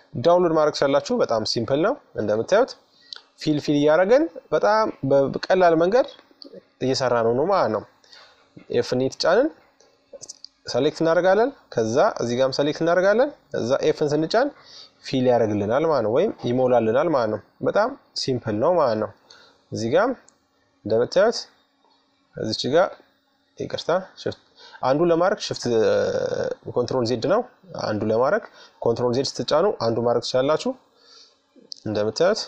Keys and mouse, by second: 1.0 f, 1.3 f, 2.6 middle click, 4.7-7.9 right drag, 7.1 f, 9.4-12.9 right drag, 12.3 f, 13.8-16.7 middle drag, 16.7-18.6 right drag, 17.6 middle click, 18.0 middle click, 18.6-21.4 middle drag, 21.4-23.0 right drag, 23.0 ctrl+z, 24.5-25.6 right drag, 25.6 middle click, 28.6 f, 29.8-31.3 middle drag, 31.3-32.4 right drag.